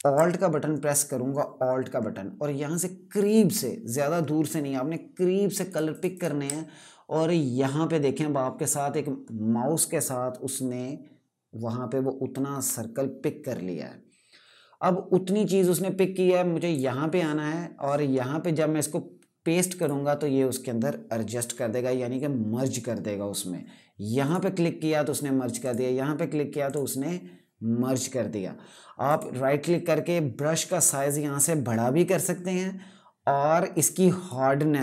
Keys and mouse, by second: 5.4 click, 5.6 click, 5.8 click, 16.4 click, 19.5 click, 23.9 click, 28.8 right click, 30.5 click, 34.0 click.